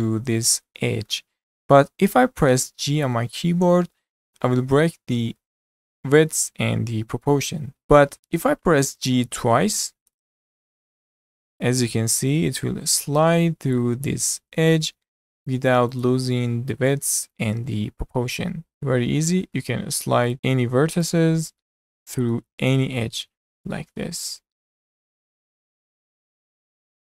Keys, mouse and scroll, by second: 1.1-3.1 middle drag, 3.1 g, 10.1 g, 16.3-18.1 middle drag, 18.1 g, 18.7-20.3 middle drag, 20.3 click, 20.3 middle click, 21.1 click, 21.4 scroll up 1, 21.6 shift+middle click, 22.3 g, 24.0-25.3 middle drag, 25.3 click, 25.6 g.